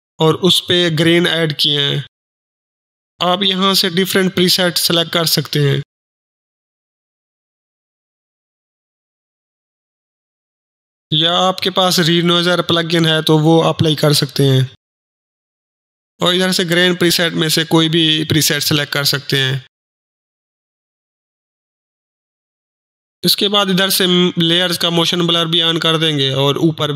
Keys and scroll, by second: 0.0-1.2 typing, 10.6 Delete, 11.9-14.7 typing, 14.8 Return.